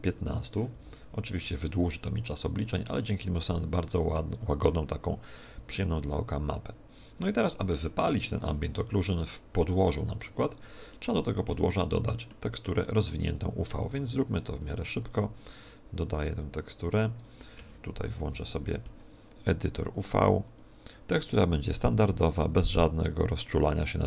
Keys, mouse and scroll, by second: 9.4 Escape, 10.1 right click, 10.9 middle click, 11.9 middle click, 12.6 middle click, 13.9 Tab, 14.5 u, 16.9 click, 18.1 shift+F10, 20.4 click.